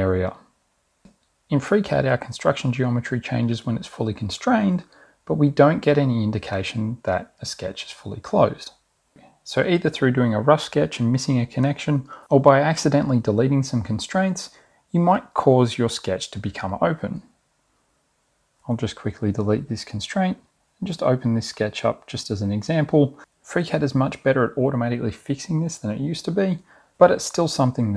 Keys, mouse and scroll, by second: 11.1 click, 12.3 click, 13.6-13.9 scroll down 2, 14.2-14.5 scroll down 2, 17.4 click, 20.4 Delete, 22.8-25.6 drag.